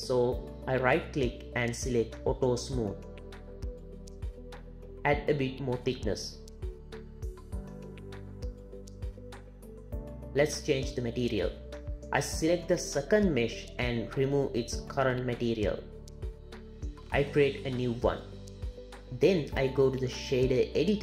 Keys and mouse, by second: 0.2-3.0 drag, 4.6-6.4 shift+drag, 9.0 z, 12.4 click, 15.3 click, 17.4 click, 18.3 click.